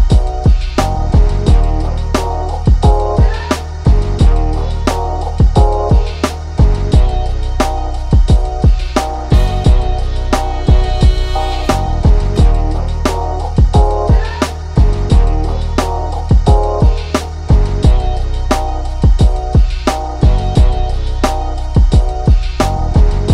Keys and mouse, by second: 2.3-6.3 drag, 10.0-15.7 drag, 15.9 click, 17.1 click, 17.2 ctrl+z, 18.2-23.3 drag.